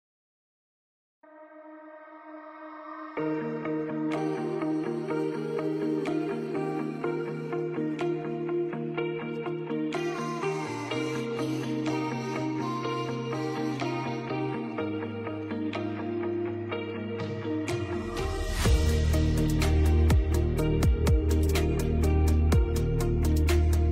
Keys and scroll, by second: 2.9 F2, 3.8 Escape, 9.6 F2, 13.4 F8, 13.7 BackSpace, 15.7 shift+n, 17.5-19.7 typing, 20.4 ctrl+space, 23.2 F2.